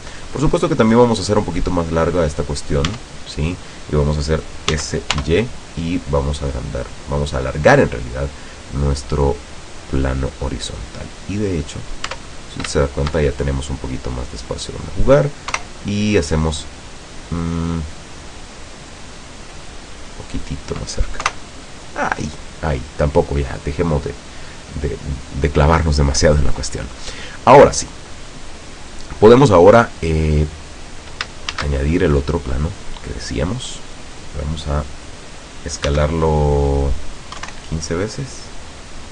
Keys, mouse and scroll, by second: 0.7 right click, 1.5-2.9 middle drag, 3.0 Tab, 4.9 s, 5.3 y, 6.9 click, 8.9-11.0 drag, 11.5 right click, 12.2 Tab, 12.5 right click, 13.0 shift+right click, 13.4-14.0 shift+scroll down 2, 14.0-15.5 drag, 15.7 KP_0, 17.7-18.5 middle drag, 18.5 scroll down 2, 19.8-21.1 drag, 21.3 KP_0, 24.7-25.1 scroll down 2, 25.1-25.5 scroll up 2, 26.6-27.3 middle drag, 27.3-27.9 scroll down 4, 28.2-28.9 middle drag, 28.9 right click, 31.6 shift+a, 33.4 click, 36.0 s, 37.4 KP_1, 37.6 KP_5.